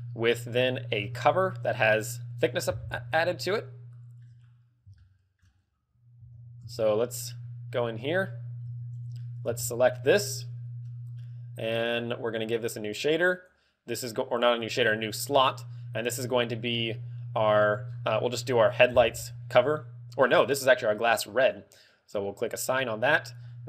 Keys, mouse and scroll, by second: 0.2 middle click, 1.2 scroll down 2, 1.2 shift+middle click, 3.1 shift+middle click, 4.5 scroll up 2, 5.2 shift+middle click, 5.8 scroll up 1, 6.1 z, 6.6 Tab, 7.4-7.7 scroll up 2, 8.2 scroll up 2, 8.7 a, 9.5 l, 10.2 middle click, 12.3 middle click, 12.3 l, 12.5 click, 12.8 click, 13.2 click, 22.7 click.